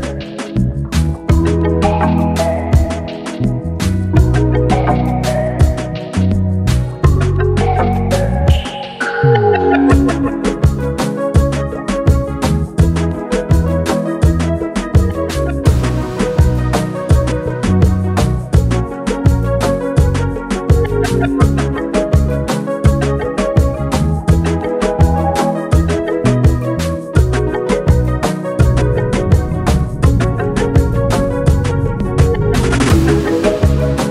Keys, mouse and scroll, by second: 12.6-14.0 drag, 16.3-17.2 drag, 19.3 ctrl+j, 20.0 click, 22.8 click, 27.2 shift+Down, 31.3 Left.